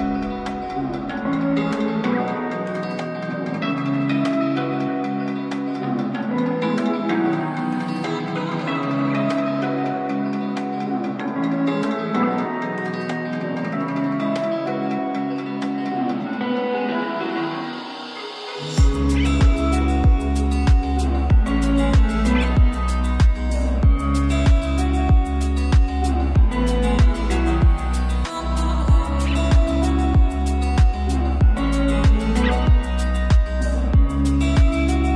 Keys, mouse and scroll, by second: 0.2 click, 3.7 click, 3.7-10.0 drag, 10.0 click, 10.0-12.5 drag, 12.5-13.5 scroll down 1, 13.5 click, 14.4-16.4 scroll down 1, 16.5-17.1 scroll up 1, 18.5 scroll up 1, 18.5 shift+click, 19.7 space, 26.1-28.5 shift+drag, 31.4 space.